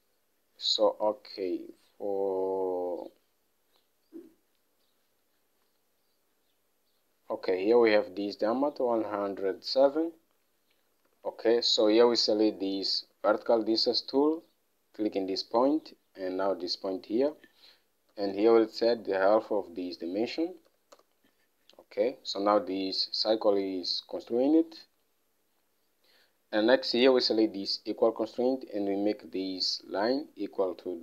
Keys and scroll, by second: 11.6 alt+Tab, 18.3-21.1 typing, 21.3 Return.